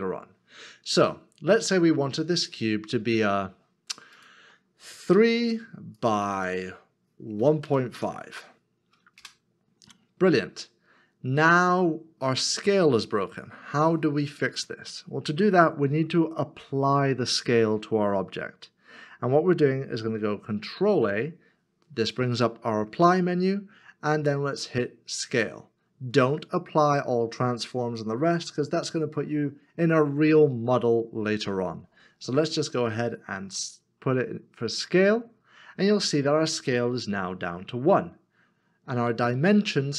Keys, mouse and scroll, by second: 5.1 Return, 7.4-8.4 typing, 9.2 Return, 20.9 ctrl+a.